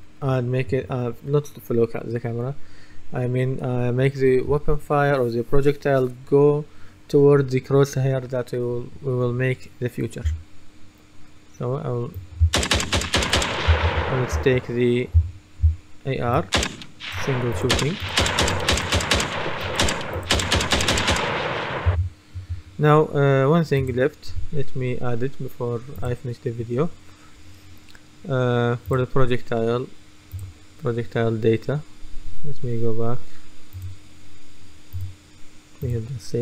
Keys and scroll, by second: 10.3 w, 12.5 d, 13.5-15.7 typing, 21.9 Escape.